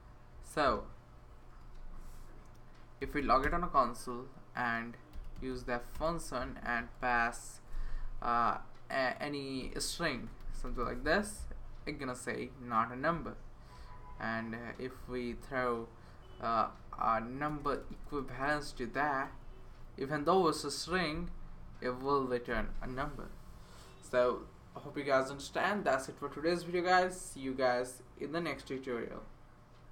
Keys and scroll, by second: 1.5 Return, 1.7 Return, 2.7-3.7 typing, 4.9-7.4 typing, 9.3-11.2 typing, 16.8 Left, 17.5-20.2 typing.